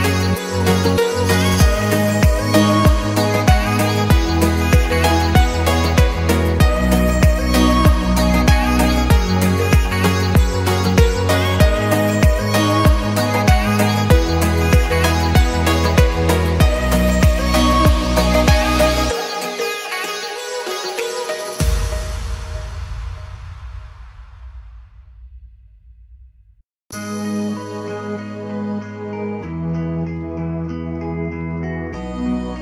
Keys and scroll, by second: 1.5 Escape, 3.5 Escape, 4.6 Escape, 12.6 Escape, 14.3 o, 18.3 Escape.